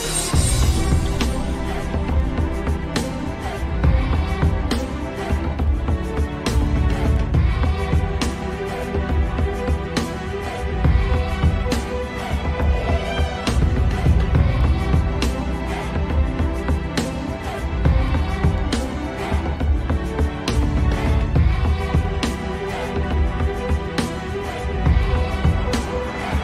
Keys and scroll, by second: 1.0 Escape, 8.5 shift+F2, 8.8 Escape, 10.2 shift+Page_Up, 17.2 w, 24.9 shift+F2, 25.5 g.